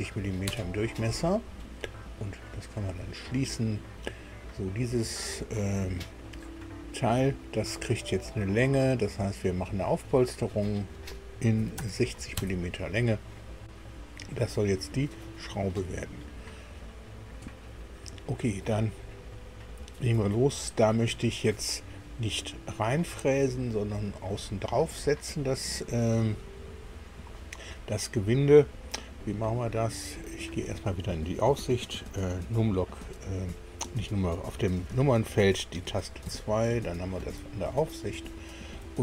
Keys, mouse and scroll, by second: 0.4 KP_Enter, 2.6 click, 9.9 click, 11.6 KP_6, 11.8 KP_0, 12.4 KP_Enter, 13.9-15.6 middle drag, 36.2 KP_2, 37.7-38.9 shift+middle drag.